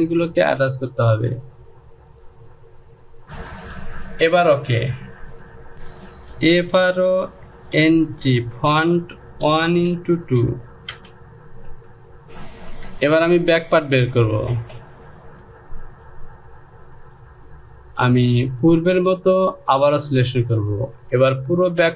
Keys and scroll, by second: 3.2 ctrl+z, 5.7 e, 7.6-12.1 typing, 13.5 Return.